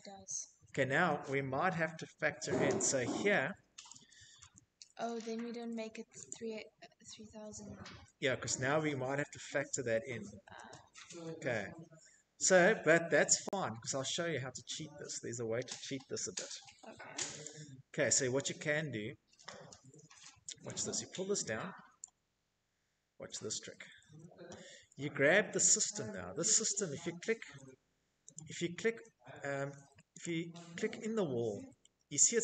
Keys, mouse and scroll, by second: 2.0 click, 4.2 click, 4.7 Escape, 5.7-6.1 scroll, 8.6 z, 10.0 scroll, 10.9 scroll, 15.4 click, 20.0 click, 22.0 Escape, 24.8 Tab, 25.5 Tab, 27.1 Escape, 30.2 Tab, 31.5 middle click, 31.5 click, 31.7-32.1 scroll.